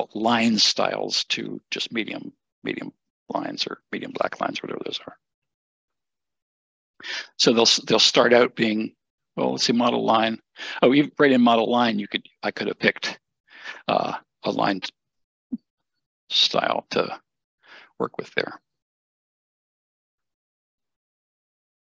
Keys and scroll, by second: 20.8 Escape, 20.9 Escape.